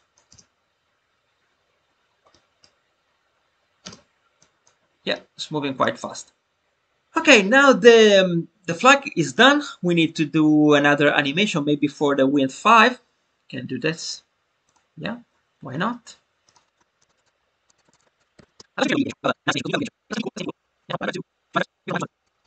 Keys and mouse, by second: 2.3-2.7 middle drag, 3.7 space, 4.3 drag, 13.9 click, 14.6 click, 16.4 click, 17.1 click, 17.9 click, 18.6 space, 20.1 space, 20.3 click, 21.9 space, 22.2 click, 22.4 click.